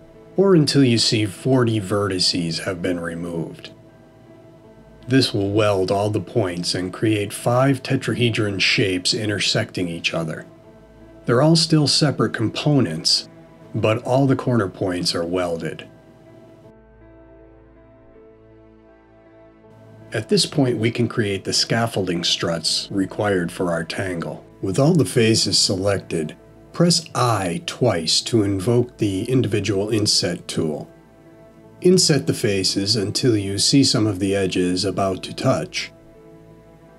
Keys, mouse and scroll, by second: 8.9 middle click, 26.8 i, 35.1 click.